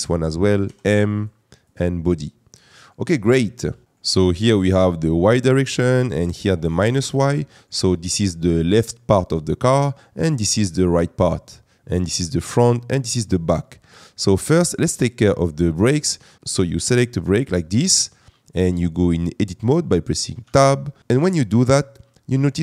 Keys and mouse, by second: 0.6 m, 17.9 click, 20.4 Tab.